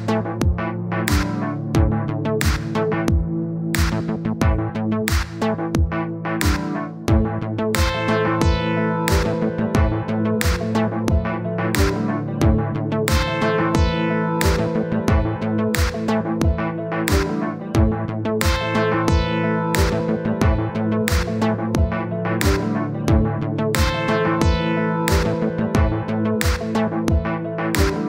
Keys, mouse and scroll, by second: 0.2-1.0 scroll up 1, 1.0-2.2 drag, 2.4 click, 6.5-7.8 drag, 8.3-10.2 drag, 11.9 l, 14.6 click, 16.7 click, 18.0 scroll down 2, 18.1 middle click, 18.4-19.1 scroll up 1, 19.1 click, 19.9-21.0 drag, 21.0 scroll down 1, 21.1 middle click, 21.6-22.2 scroll up 1, 22.2-23.5 middle drag, 25.0 click, 26.9 scroll down 2, 27.0-28.0 middle drag.